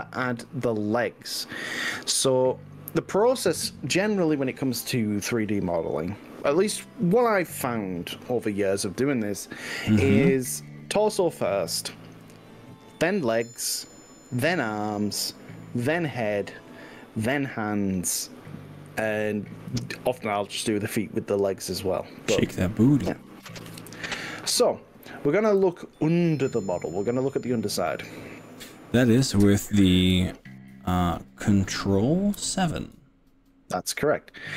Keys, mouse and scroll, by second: 4.8-7.3 drag, 8.8-9.5 middle drag, 11.2 z, 12.9 middle click, 13.9-17.3 middle drag, 17.3 click, 18.7 click, 19.8 g, 25.3 click, 25.7 ctrl+z, 26.3-27.8 middle drag, 32.5 ctrl+KP_7.